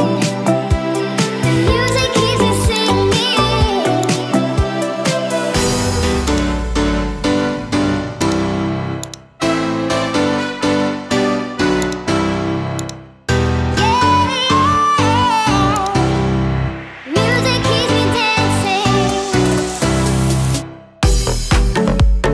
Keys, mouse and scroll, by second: 19.6 click, 20.4-21.7 drag, 21.5 KP_0.